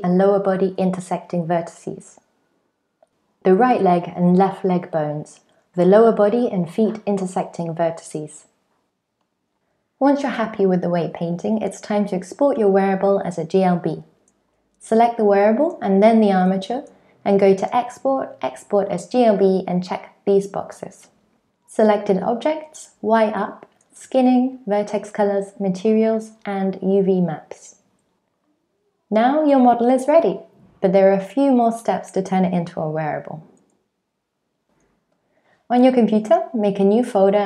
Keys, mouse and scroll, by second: 0.1 middle click, 0.1 shift+middle click, 0.2 alt+z, 0.2 middle click, 0.3 ctrl+click, 0.4 middle click, 0.6-2.9 click, 0.9 click, 2.9 middle click, 3.0 click, 3.2 click, 3.2 middle click, 3.3 click, 3.4 middle click, 3.6 click, 3.9 click, 4.0 middle click, 4.1 click, 4.3 click, 4.4 middle click, 4.5 click, 4.6 middle click, 4.7 click, 4.9 click, 5.0 middle click, 5.1 click, 5.3 middle click, 5.3 click, 5.4 middle click, 5.5 click, 5.6 click, 5.7 click, 5.8 click, 5.9 middle click, 6.0 click, 6.1 middle click, 6.2 ctrl+click, 6.4 ctrl+click, 6.6 middle click, 6.7 ctrl+click, 6.7 shift+middle click, 6.8 middle click, 7.0-7.4 click, 7.0 f, 7.5 click, 7.6 ctrl+click, 7.7 click, 7.9-8.5 click, 8.1 click, 8.2 ctrl+click, 8.3 click, 8.4 click, 8.7 click, 8.8 ctrl+click.